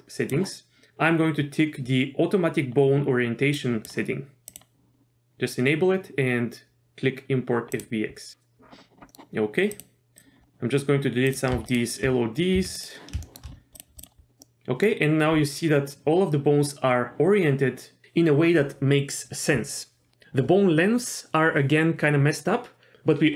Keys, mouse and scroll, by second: 8.8 scroll down 1, 9.1 middle click, 9.7 click, 10.4 scroll down 1, 11.2 click, 11.7 shift+click, 12.5 x, 13.2 shift+middle drag, 13.5 scroll up 1, 13.7 click, 14.0 click, 14.4-14.8 middle drag.